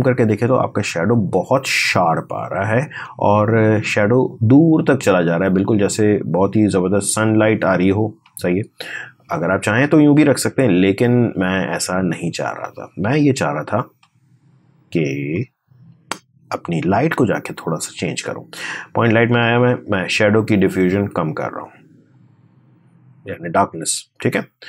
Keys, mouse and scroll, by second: 0.1 space, 0.9-2.2 scroll up 1, 4.0-4.3 scroll down 1, 6.8 space, 7.1 click, 7.4 space, 11.9 click, 13.6 space, 15.1-24.6 drag.